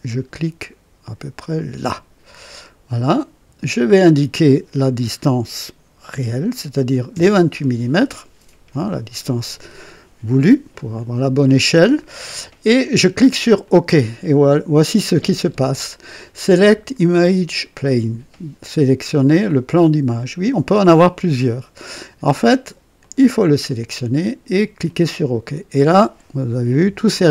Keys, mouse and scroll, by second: 1.5 click, 3.9 click, 6.1 KP_2, 7.1 KP_8, 13.6 click, 23.0 click, 24.8 click.